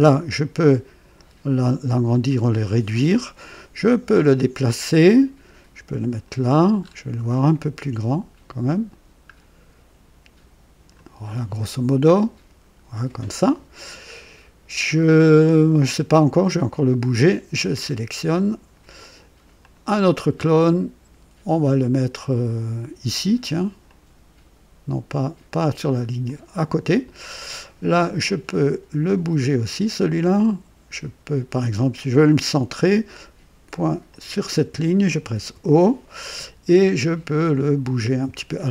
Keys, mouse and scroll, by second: 0.6-2.5 drag, 4.1-6.4 drag, 6.8 scroll up 1, 8.6-11.1 drag, 12.1 scroll down 1, 17.1-18.6 drag, 19.6 click, 23.8-25.5 drag, 26.2 click, 29.6-30.5 drag, 32.2 click, 34.1 click, 35.3 o.